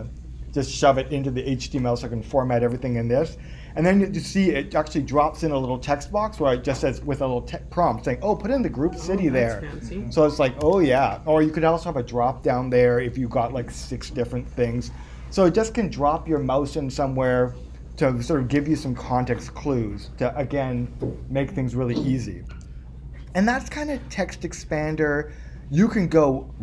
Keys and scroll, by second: 19.5 super+Escape, 22.5 super+Tab.